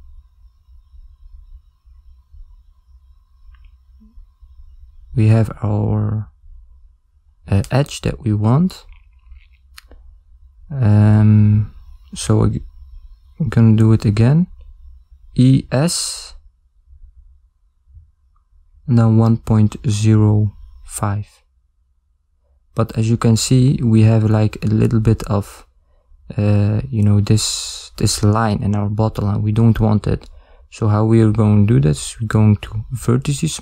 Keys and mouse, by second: 1.2 shift+middle click, 3.7 click, 5.9 ctrl+z, 7.0 ctrl+z, 8.0 ctrl+z, 8.5 ctrl+z, 12.9 e, 17.4 Tab, 19.8 click, 21.5 ctrl+middle click, 22.1 middle click, 27.5 click, 28.4 ctrl+middle click, 29.4 Tab, 30.2 ctrl+middle click, 32.5 click.